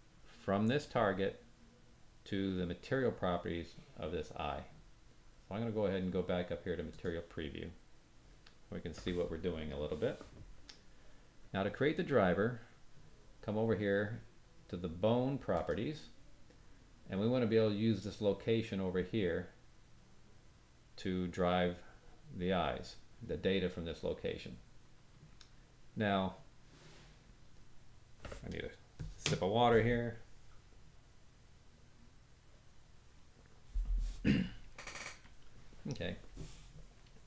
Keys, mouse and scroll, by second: 6.9 click, 15.5 click.